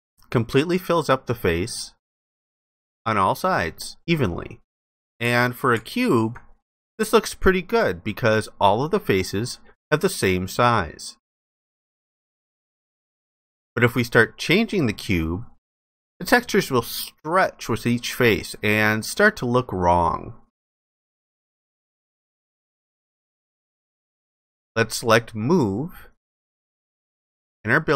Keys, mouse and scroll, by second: 5.7 alt+click, 6.8 alt+click, 13.0 ctrl+alt+click.